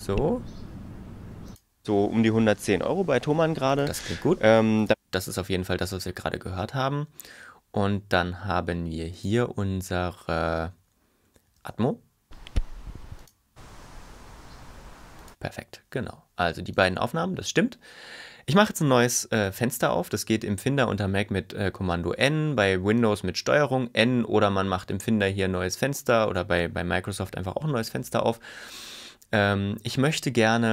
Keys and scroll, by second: 11.7 space, 22.1 super+n.